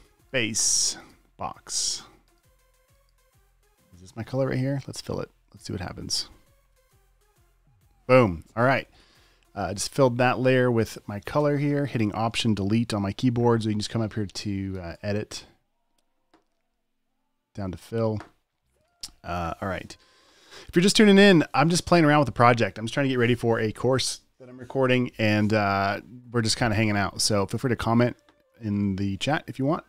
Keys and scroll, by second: 7.0 alt+BackSpace, 7.2 v.